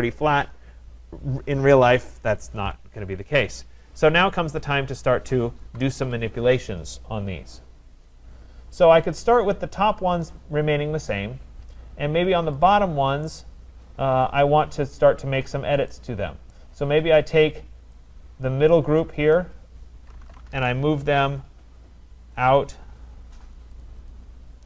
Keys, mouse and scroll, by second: 1.4 right click, 4.0 click, 4.6 click, 5.7 Delete, 7.4-7.9 scroll, 8.3-8.8 scroll, 10.2 click, 12.6 click, 13.3-14.2 scroll, 15.8 middle click, 16.5 right click, 19.1 click, 19.9-21.0 typing, 21.4 click, 22.4 click, 23.8 click, 24.0-24.6 typing.